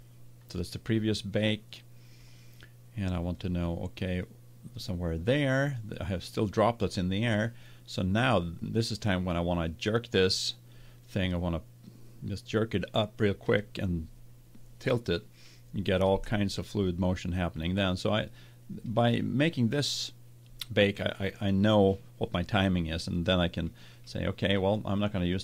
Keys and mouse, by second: 0.0-1.9 drag, 2.2-6.9 drag, 25.3 click.